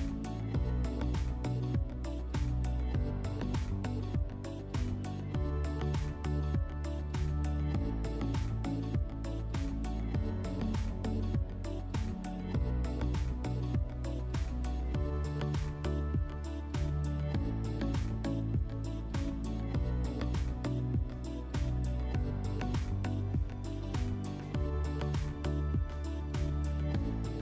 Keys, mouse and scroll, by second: 3.6-5.1 drag, 5.8-6.8 drag, 9.0 click, 14.0-15.5 drag, 16.5 w, 19.1-20.7 drag, 21.9-23.4 drag, 25.5-27.0 drag, 27.3-27.4 drag.